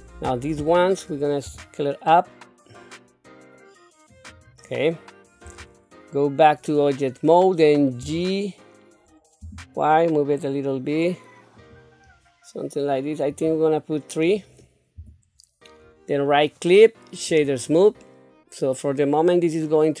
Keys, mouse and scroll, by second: 1.4 s, 5.4 Tab, 8.0 g, 13.3 click, 15.0 q, 16.1-17.4 right drag, 18.0-20.0 middle drag.